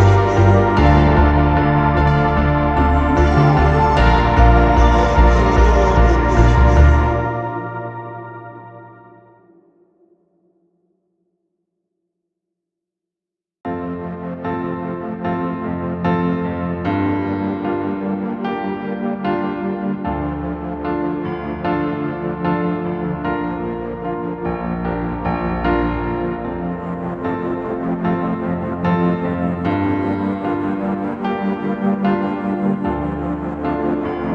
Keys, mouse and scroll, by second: 0.4 p, 2.8 space, 3.4 middle click, 3.7 click, 4.0 click, 4.0-5.2 typing, 6.1 click, 6.2 space, 6.4 click, 7.0 p, 8.1 space, 8.7 space, 9.6 Delete, 10.4 m, 11.4-11.9 scroll down 1, 11.9 space, 13.0 space, 13.1-13.5 scroll down 1, 14.7 ctrl+s, 15.6 Escape, 15.7 scroll down 2, 16.0 scroll up 2, 16.2 scroll down 1, 16.5 r, 17.1 click, 17.4-17.7 scroll down 1, 17.4 space, 17.7 middle click, 18.2-20.3 drag, 18.2 space, 19.3 p, 20.5-24.2 typing, 25.3-26.0 typing, 26.9-27.2 scroll down 2, 27.2-31.5 typing, 31.9 click, 31.9 right click, 32.7 r, 33.6 space.